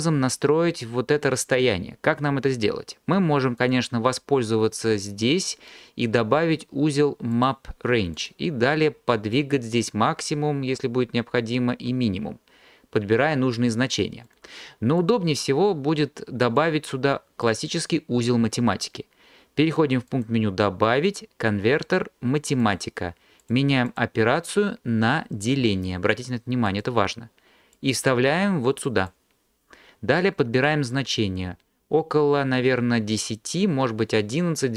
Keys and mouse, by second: 3.6-7.5 drag, 8.3 click, 9.5-14.2 drag, 14.3 click, 20.2-22.8 drag, 24.0-26.8 drag, 31.0-34.7 drag.